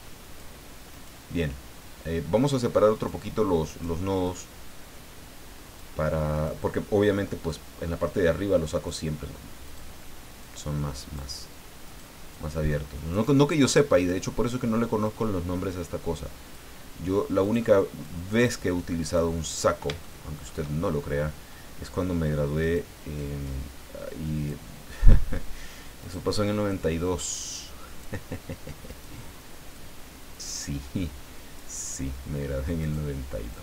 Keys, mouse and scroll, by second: 0.9 right click, 1.8 click, 2.9 right click, 3.6 right click, 4.2-5.9 drag, 6.3 right click, 7.5-9.0 drag, 9.6 right click, 10.4 click, 11.8 right click, 12.3 click, 14.0 right click, 15.0-16.7 drag, 17.4 right click, 18.0-19.3 drag, 20.0 shift+middle click, 22.6 right click, 22.9 middle click, 23.1-24.6 drag, 26.0 right click, 26.3 middle click, 26.7-28.2 drag, 28.9 right click, 29.7-31.7 drag, 32.8 right click, 33.5-33.6 drag.